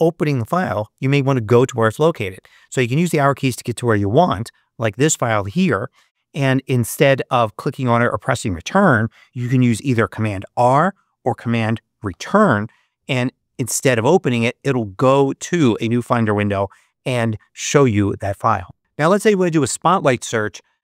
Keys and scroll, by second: 3.8 Up, 12.0 super+Return.